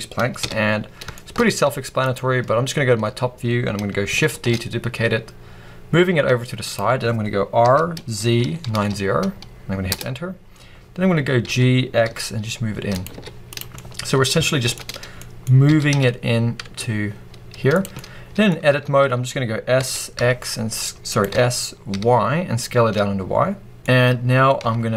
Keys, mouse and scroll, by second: 0.3 KP_7, 1.0-6.6 shift+middle drag, 1.2 scroll up 2, 1.4 z, 4.2 shift+d, 6.6 click, 7.5 r, 9.9 Return, 11.3 g, 12.9 click, 13.0 z, 13.6 scroll up 1, 13.7-17.7 middle drag, 14.8 scroll up 2, 15.8 g, 17.7 click, 17.8 middle click, 18.6 Tab, 19.6 s, 21.1 right click, 21.2 s, 23.8 middle click, 24.5 Tab, 24.5-24.9 middle drag.